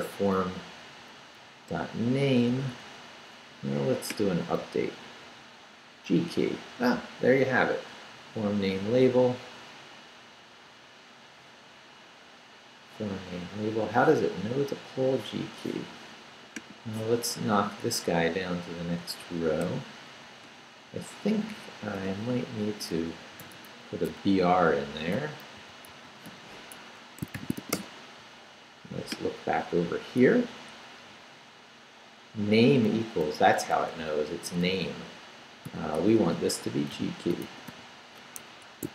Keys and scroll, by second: 0.0 Left, 0.9 Left, 1.4 Right, 2.0 Right, 2.6 Right, 4.6 super+r, 17.2 Right, 17.9 Right, 19.2 Left, 19.6 i, 20.4 Return, 22.0 Return, 22.4 Up, 23.3 shift+,, 23.4 shift+., 23.7 shift+Left, 24.5 Left, 25.3-28.1 typing, 30.5 Left, 31.0 Left, 32.9 Left, 34.1 Right, 34.7 Right, 35.6-38.9 typing, 38.4 Escape.